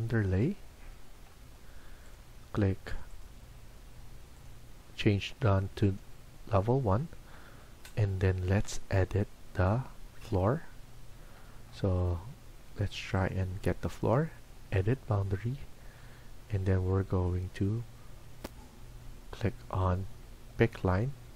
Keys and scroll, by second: 16.8 Tab.